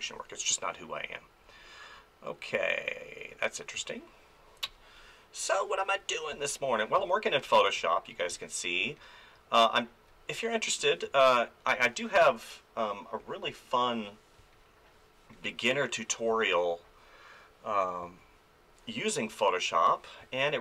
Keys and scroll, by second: 3.8 space, 6.3 space, 8.3 space, 11.0 space, 14.4 space, 16.3 space, 18.0 space, 20.2 space.